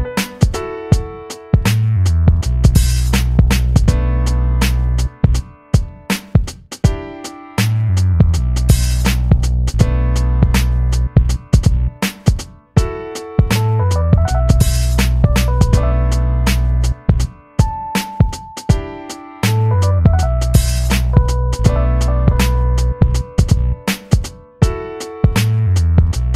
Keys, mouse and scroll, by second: 1.2 alt+shift+m, 1.2-12.5 alt+drag, 12.5 v, 12.9-16.7 drag, 18.8-23.5 alt+drag.